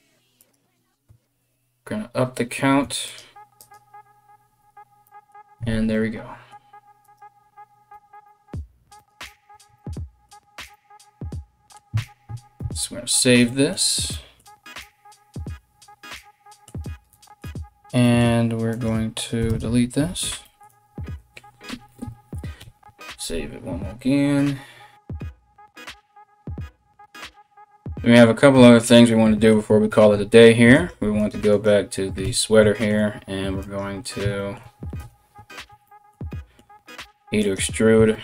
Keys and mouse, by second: 0.0 right click, 2.7-8.7 drag, 5.2 a, 5.3 a, 6.6 right click, 7.5 g, 8.7-38.2 middle drag, 9.1 a, 9.3 a, 12.2 ctrl+s, 18.3 right click, 19.0 x, 22.2 ctrl+s, 30.3 right click, 30.8 right click, 31.1 right click, 31.8 Tab, 33.2 right click, 34.6 KP_1, 36.6 e.